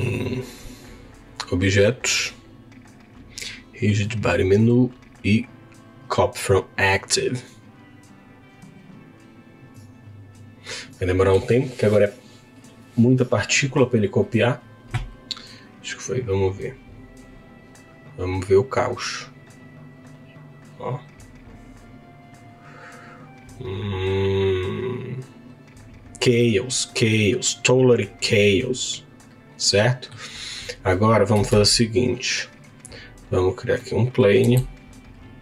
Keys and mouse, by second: 1.3-13.9 drag, 16.6 click, 18.9 click, 27.8-30.1 middle drag, 31.5 shift+a, 33.8 middle click, 34.5 s.